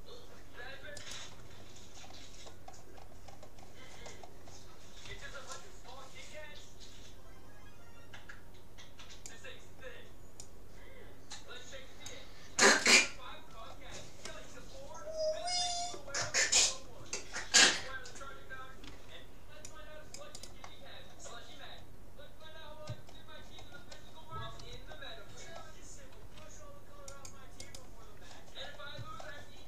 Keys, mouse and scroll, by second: 1.1-2.9 right drag, 2.1-6.1 middle drag, 5.1 c, 13.3-15.9 middle drag, 16.3-17.3 middle drag, 17.3-18.5 scroll down 1, 18.5-19.7 middle drag, 18.9 c, 20.5-22.1 right drag, 22.1-24.5 middle drag, 26.3 c, 27.7-29.3 right drag, 28.1-29.6 middle drag.